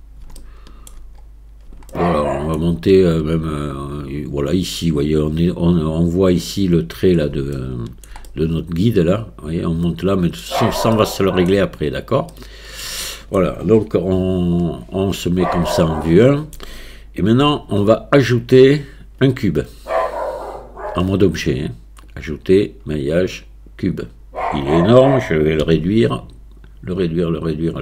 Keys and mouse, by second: 0.4 shift+middle click, 2.0 shift+middle click, 7.6 shift+middle click, 8.3-10.4 middle drag, 11.0 shift+middle click, 12.4 middle click, 13.2 shift+middle click, 14.2 KP_1, 15.8 shift+middle click, 17.4 Tab, 20.0 click, 22.1-24.1 drag, 25.6 s.